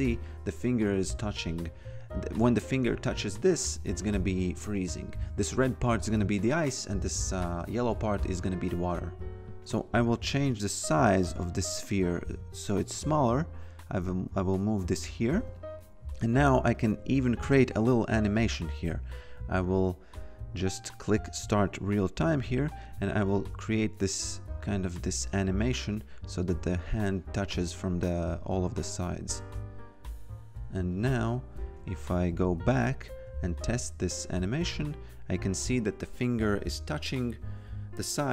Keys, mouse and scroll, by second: 4.5 f, 9.6 click, 10.0 t, 10.4 click, 12.3 e, 12.6 click, 15.5 click, 16.1-17.3 typing, 17.4 Return, 18.3 click, 21.3 click, 30.9 click, 31.7 shift+a, 32.4 click, 34.4 shift+^, 34.7 f, 36.0 click.